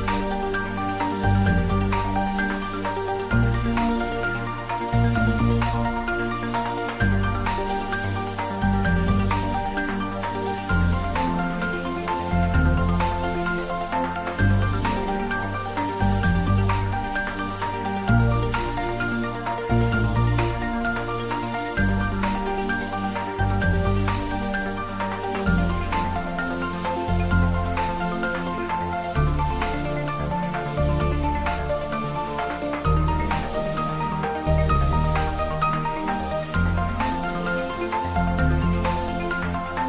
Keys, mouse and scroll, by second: 3.1 ctrl+Num_Lock, 4.4 alt+h, 5.3-6.6 middle drag, 6.6 click, 8.5 s, 10.0 click, 12.0 x, 12.3 click, 15.3 shift+middle click, 16.3 shift+middle click, 16.7 ctrl+middle click, 17.7 click, 18.3 ctrl+middle click, 19.2 shift+click, 19.8 ctrl+z, 20.1 shift+click, 21.7 g, 22.8 click, 23.5 s, 24.4 click, 24.9 ctrl+middle click, 25.8 shift+middle click, 26.2 ctrl+middle click, 26.8 shift+middle click, 27.3 ctrl+middle click, 27.8 click, 28.2 x, 28.4 click, 29.0 click, 30.0 shift+click, 30.9 shift+click, 31.5 ctrl+z, 31.8 shift+click, 32.9 s, 33.7 click, 34.6 g, 35.6 click, 37.6-39.8 ctrl+middle drag.